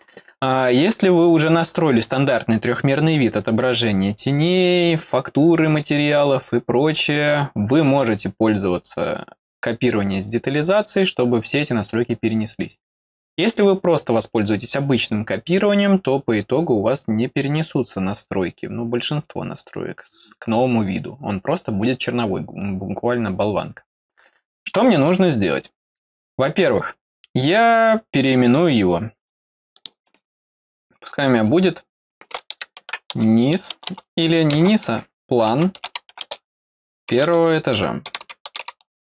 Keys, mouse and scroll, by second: 27.7 right click, 29.2 click.